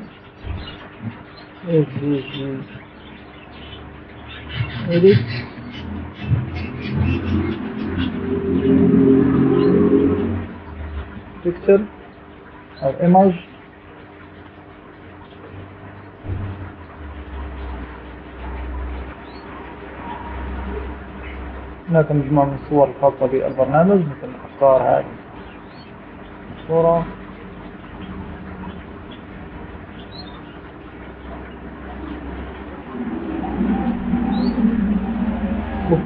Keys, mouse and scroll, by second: 2.8 s, 3.6 v, 4.3 g, 6.0-7.3 typing, 12.7 click, 25.3 click, 27.9-28.3 scroll up 2.